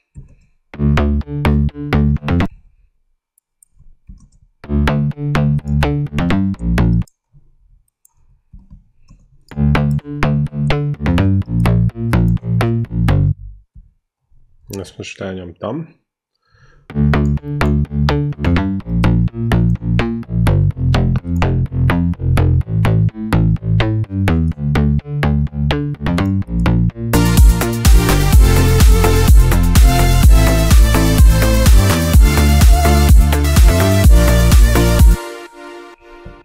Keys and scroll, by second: 0.4 ctrl+Up, 0.5 ctrl+space, 2.3 space, 2.7 ctrl+Down, 4.3 ctrl+Up, 4.5 ctrl+space, 6.8 space, 8.8 ctrl+Up, 9.3 space, 13.1 ctrl+1, 14.0 ctrl+Up, 14.9 space, 16.7 space, 20.7 ctrl+Up, 35.0 space.